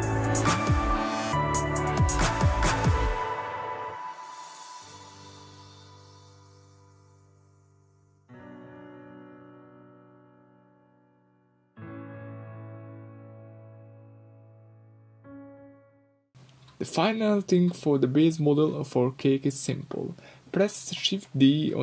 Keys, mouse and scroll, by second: 4.1 Tab, 4.5 scroll down 1, 5.1 middle click, 5.9 click, 6.4 ctrl+click, 7.5 click, 8.0 shift+click, 8.6 shift+click, 9.0 shift+click, 9.3 shift+click, 9.6 shift+click, 9.8 shift+click, 10.0 shift+click, 10.5 g, 12.0 click, 12.9 middle click, 13.2 click, 13.6-14.6 middle drag, 14.0 scroll up 2, 14.6 click, 15.2 g, 15.6 click, 15.6-16.2 middle drag, 16.0 g, 17.6 Escape, 17.6-17.9 middle drag, 17.9 drag, 18.6 g, 19.1 click, 19.2 middle click, 19.7 click, 20.0 drag, 20.3 click, 20.7 g, 21.7 Escape.